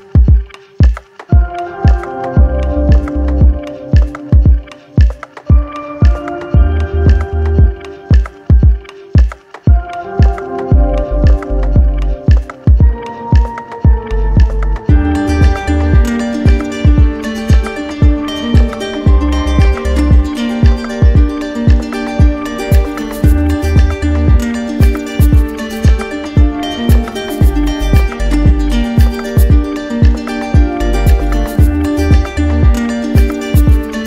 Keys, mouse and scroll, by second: 1.2 click, 2.4 alt+click, 5.2 right click, 6.5-7.6 drag, 7.6-14.0 drag, 12.9 ctrl+z, 18.3-19.5 drag, 25.9 click, 26.1 ctrl+z, 32.0 click.